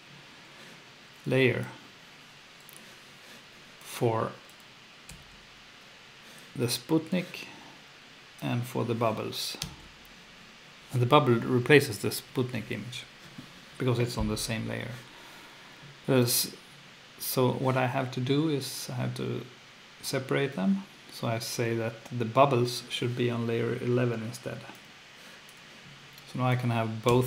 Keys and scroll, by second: 5.1 F2, 9.6 F2, 27.1 F2.